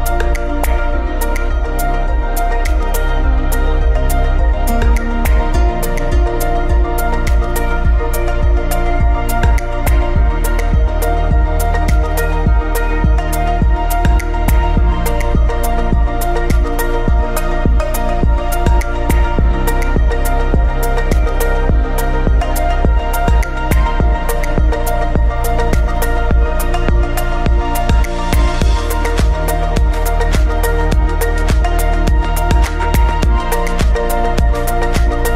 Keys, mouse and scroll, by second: 1.3-1.8 scroll up 1, 5.3-6.6 drag, 6.6 x, 7.6 shift+right click, 9.0-12.4 drag, 12.4 shift+d, 13.3 click, 13.5 scroll down 2, 13.6-15.5 middle drag, 15.5 shift+a, 21.8 click, 25.2-27.7 drag, 27.7 scroll down 2, 27.8-29.7 middle drag, 29.7 g, 30.3 click, 30.5 shift+d, 31.3 click, 32.8 ctrl+shift+click, 34.7-35.3 drag.